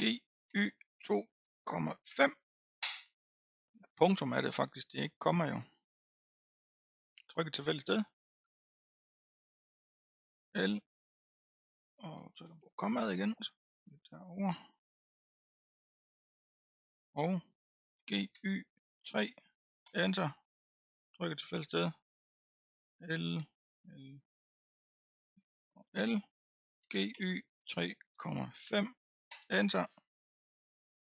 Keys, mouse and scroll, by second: 3.7-4.6 scroll down 10, 4.6-6.6 scroll up 8, 6.6 click, 7.0-7.7 scroll up 2, 8.0-10.4 middle drag, 10.4 l, 10.9-12.4 middle drag, 12.4 KP_Decimal, 14.0 l, 15.0 l, 16.4 l, 17.9 g, 21.0 click, 22.8 l, 23.7 l, 25.0 l, 25.8 l, 26.8 g, 30.0-31.1 scroll down 19.